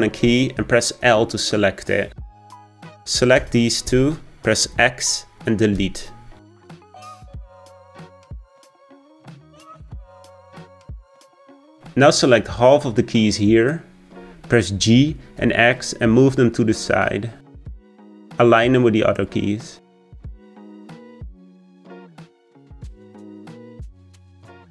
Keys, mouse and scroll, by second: 1.0 l, 3.4 l, 4.7 x, 9.2 click, 14.8 g, 21.5-22.6 shift+middle drag, 22.6 click.